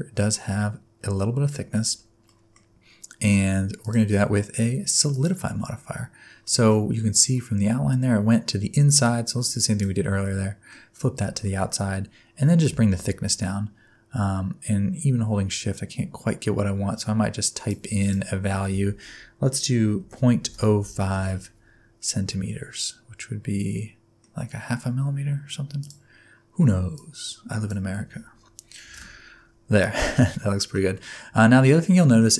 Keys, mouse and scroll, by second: 2.2 middle click, 2.6-3.8 scroll up 5, 3.8 click, 6.4 middle click, 9.0 click, 10.2 middle click, 11.4 middle click, 12.6 click, 18.0 click, 22.7 middle click, 25.8 click, 29.8 middle click, 30.9 middle click, 32.0 middle click.